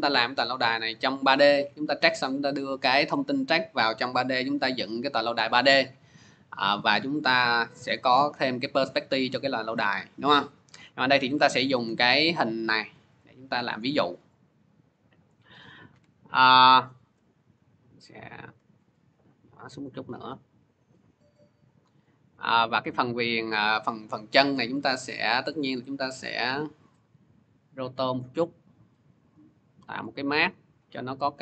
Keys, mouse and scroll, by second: 2.7-7.8 drag, 10.6 click, 11.3 scroll, 11.9-12.8 scroll, 12.8 scroll, 14.1 click, 16.9 shift+click, 17.3 click, 19.8 shift+click, 21.6 click, 22.0 middle click, 22.8 scroll, 24.7 click, 26.0 click, 26.7 click, 26.8 scroll, 27.5 click, 28.2 click, 29.1 click, 29.8 click, 30.5 click, 31.2 click.